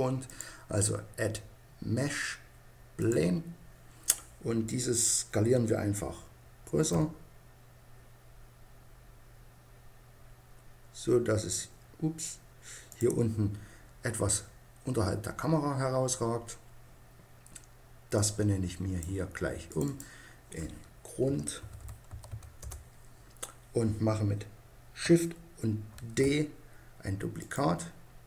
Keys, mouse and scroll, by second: 0.3-2.1 drag, 6.9 s, 13.0-14.9 drag, 14.9-18.1 middle drag, 18.2-21.5 drag, 26.0 shift+d, 27.4-28.2 drag.